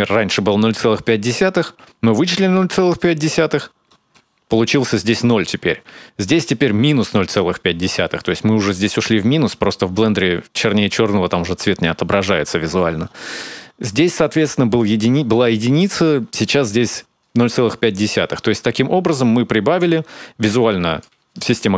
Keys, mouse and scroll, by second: 3.1-3.7 scroll up 7, 3.7 middle click, 17.8 shift+click.